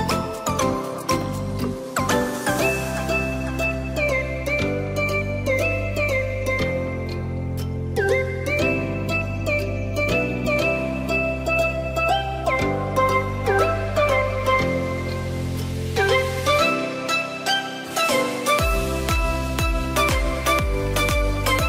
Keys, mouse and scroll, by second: 1.1 Up, 2.6 click, 3.3 Tab, 4.2 click, 4.5 click, 5.5 Tab, 6.0 click, 6.6 shift+click, 8.3 alt+e, 15.2 click, 15.8-18.3 middle drag, 18.3 click, 19.3 Tab, 19.8 click, 20.5 click, 20.9-21.6 middle drag.